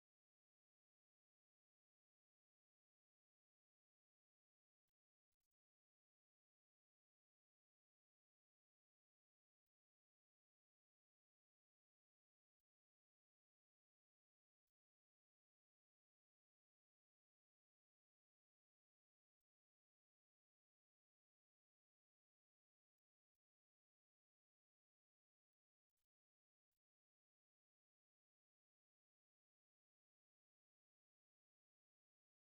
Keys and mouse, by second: 1.2 middle click, 1.7 a, 1.9 middle click, 3.0 alt+right click, 4.0 a, 4.4 c, 5.6 w, 8.0 middle click, 9.0 right click, 11.2 c, 12.2 2, 13.8 1, 15.0 w, 18.6 a, 18.9 middle click, 20.2 ctrl+middle click, 20.6 shift+middle click, 21.1 middle click, 22.1 right click, 22.4 shift+right click, 23.6 shift+middle click, 23.6 c, 27.7 shift+middle click, 28.1 ctrl+middle click, 29.0 c, 31.7 shift+right click.